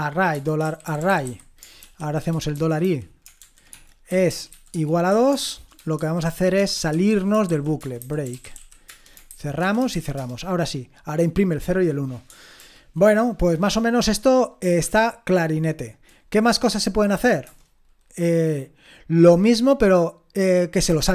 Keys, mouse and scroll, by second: 0.0-10.7 typing, 12.6 ctrl+l, 14.8 ctrl+p, 17.4 Return.